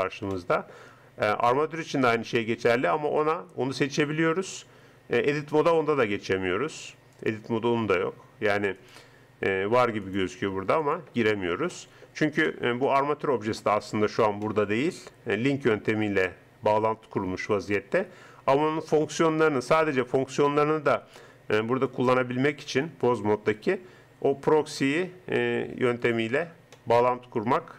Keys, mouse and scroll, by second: 1.5-3.1 right drag, 3.2 click, 4.5 Tab, 5.5 Tab, 5.9 Tab, 7.1-8.1 drag, 10.6-11.7 drag, 11.7-14.5 middle drag, 15.1 middle click, 15.6 middle click, 16.1 middle click, 21.9 click, 23.1 click, 24.6-26.7 right drag, 26.7 middle click, 27.4-27.7 middle drag.